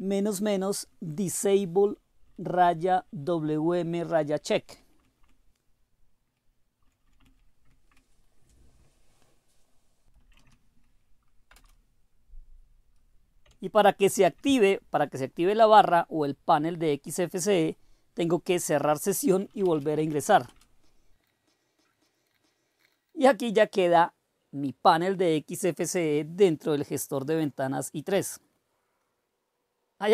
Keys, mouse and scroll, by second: 0.1 Right, 0.6 Right, 0.9 Right, 1.3 Right, 1.4 Right, 1.5 Right, 1.9 Right, 2.2 Right, 2.5 Right, 2.9 Right, 3.3 Right, 3.6 Right, 4.0 Right, 4.3 Right, 4.6 Right, 4.9 Right, 5.0 Right, 5.2-6.2 Right, 6.8 Right, 7.0 Right, 7.2 Right, 7.6 Right, 10.1 ctrl+o, 11.5 Return, 14.1 ctrl+x, 19.1-20.4 typing, 20.4 Return, 21.3 super+r, 22.3 super+r, 22.5 super+e.